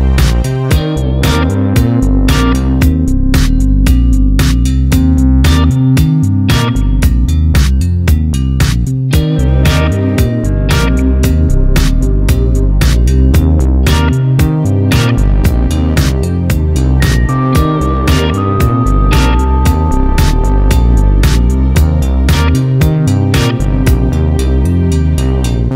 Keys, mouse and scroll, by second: 6.7 scroll up 1, 7.6-7.9 scroll down 1, 9.5 scroll down 1, 10.6 click, 12.3 click, 16.4 click, 16.8 KP_Decimal, 17.3 click, 17.7 KP_Decimal, 19.3-19.7 scroll up 1, 24.9 click.